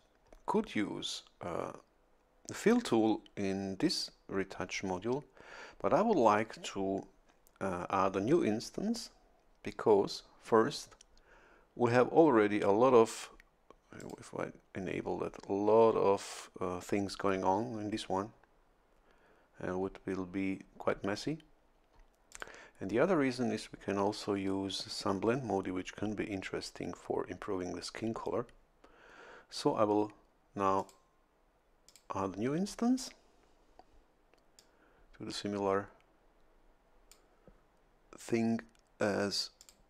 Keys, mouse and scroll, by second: 14.0 click, 22.3 click, 30.8 click, 31.9 click, 34.6-37.3 drag, 37.3-39.6 middle drag, 39.6 click.